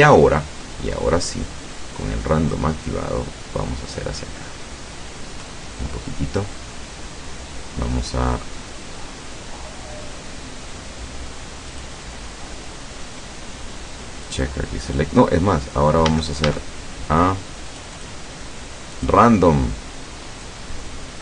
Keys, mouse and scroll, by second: 0.6 middle click, 2.6-6.6 drag, 11.8 click, 14.3 click, 16.2 a, 17.8 click, 19.1 click, 20.5-21.2 drag.